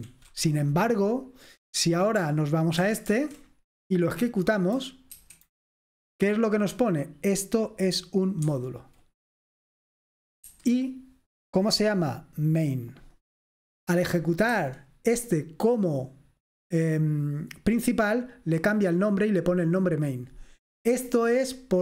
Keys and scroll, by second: 2.8 ctrl+w, 3.1 ctrl+w, 5.2 F5, 8.5 Escape, 10.5 F5, 14.6 Escape.